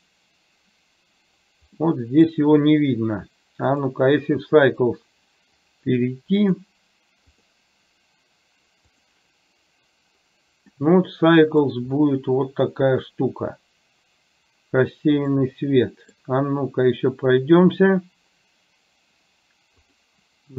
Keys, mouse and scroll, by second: 2.0 middle click, 3.8 click, 5.6 click, 6.5-7.8 drag, 10.9-11.8 middle drag, 15.5-16.1 middle drag, 19.9 click.